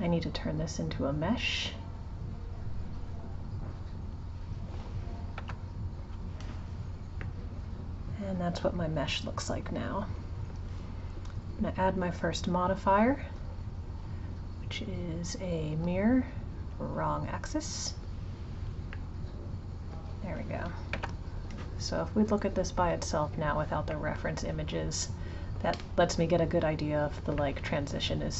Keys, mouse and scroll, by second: 5.4 Tab, 7.3-10.3 middle drag, 11.9 click, 12.9-16.0 drag, 16.8 click, 17.8 click, 19.0-21.0 middle drag, 21.0 Tab, 23.4 click, 24.0-27.0 middle drag, 27.4-28.3 middle drag.